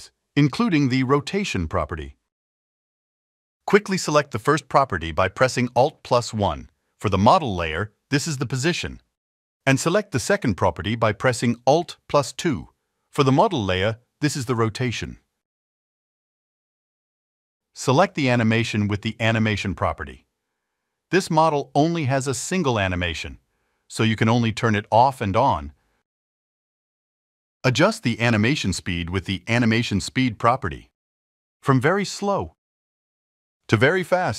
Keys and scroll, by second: 6.1 alt+1, 10.6 alt+2, 34.1 3.